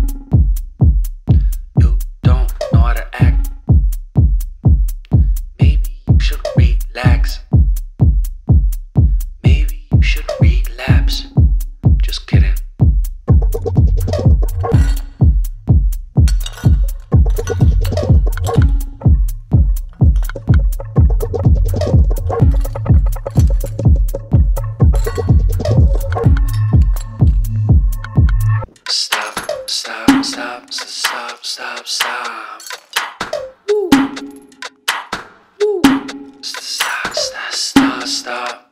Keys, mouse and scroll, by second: 1.0-3.5 typing, 4.5 click, 5.6 right click, 6.8 click, 17.1-18.0 typing, 18.6 Return, 21.9 click, 25.6 BackSpace, 27.0 4, 27.7 click, 31.1 click, 33.4 Return, 34.1 click, 36.0 typing, 36.1 click, 38.2 typing.